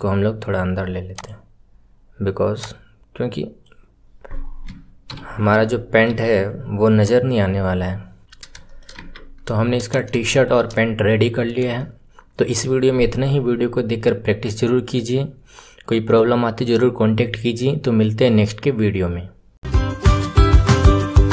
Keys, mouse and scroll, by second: 2.5 click, 5.0 ctrl+KP_Subtract, 6.0 s, 8.2 click, 8.3 scroll down 2, 8.6-8.9 shift+middle drag, 8.9 Tab, 9.2-9.8 scroll down 1, 9.8 click, 10.2-14.7 shift+middle drag.